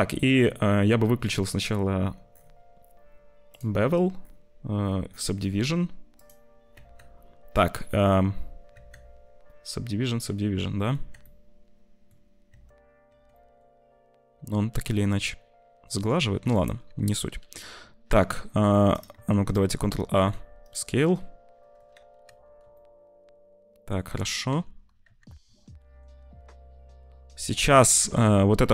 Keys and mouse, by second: 3.4 click, 6.1 click, 6.7 Tab, 7.9 middle click, 8.6 Tab, 10.8 Tab, 11.2 middle click, 12.4 Tab, 13.0 Tab, 13.3 middle click, 14.2 Tab, 14.8 z, 15.8 Tab, 17.2 ctrl+shift+b, 19.1 Tab, 19.6 ctrl+a, 20.2 s, 22.2 z, 22.6 c, 22.6-23.9 shift+middle drag, 24.4 Tab, 25.0 z, 25.7 ctrl+shift+b.